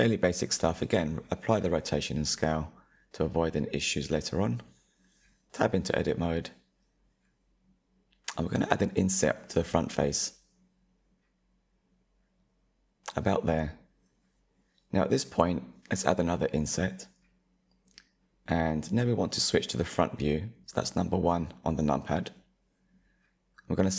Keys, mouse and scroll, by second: 2.0-2.9 shift+middle drag, 2.9-4.1 scroll up 2, 4.1 /, 5.0 Tab, 6.2 click, 7.4-9.1 middle drag, 9.1 i, 15.5 i, 18.5-21.5 middle drag, 22.0-23.6 drag.